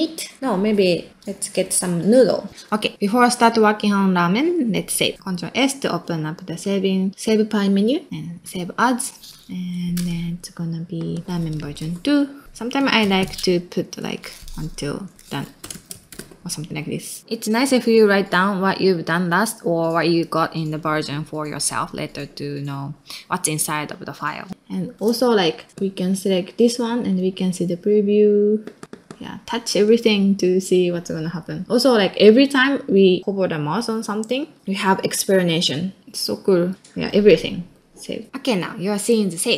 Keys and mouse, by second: 5.1 click, 39.1 middle click.